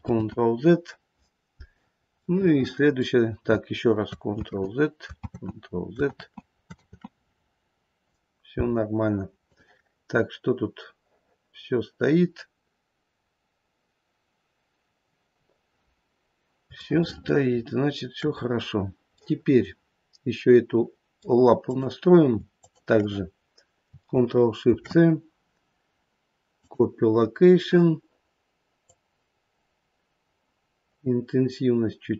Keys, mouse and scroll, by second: 0.1 ctrl+z, 1.8-2.6 scroll down 2, 2.1 middle click, 2.6 middle click, 2.8 middle click, 4.4 ctrl+z, 5.2 ctrl+z, 6.1 ctrl+z, 6.8 ctrl+z, 9.3 click, 10.0-12.4 scroll down 4, 16.0-16.6 scroll up 2, 16.8 shift+middle click, 19.1 middle click, 21.6 click, 22.5 shift+click, 24.5 ctrl+shift+c, 28.8 click.